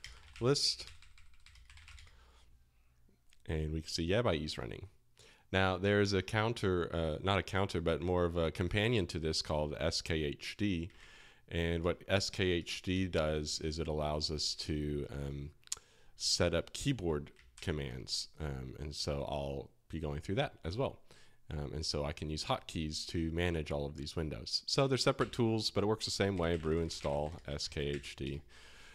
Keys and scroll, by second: 0.0-2.3 typing, 3.4 typing, 10.9 super+Tab, 11.8-13.2 typing, 17.5 shift+super+], 25.1 alt+1, 26.3-28.9 typing.